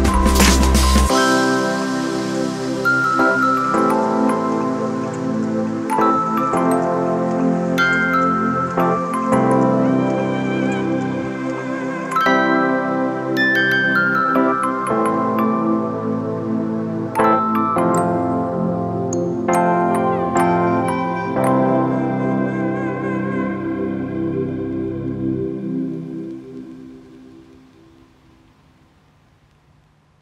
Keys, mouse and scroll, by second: 18.1 ctrl+0.